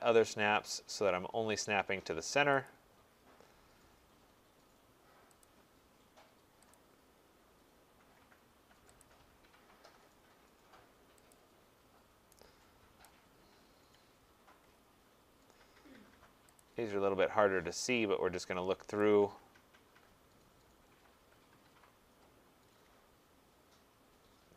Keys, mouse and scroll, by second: 3.2 middle click, 5.4 click, 6.8 click, 7.2 middle click, 13.1 right click, 14.0 middle click, 14.1 middle click, 14.2 middle click, 14.3 middle click, 14.6 middle click, 14.7 middle click, 16.6 click, 19.0 click, 19.0-19.8 scroll, 21.3-21.6 scroll, 22.0-24.0 scroll, 24.0-24.5 scroll.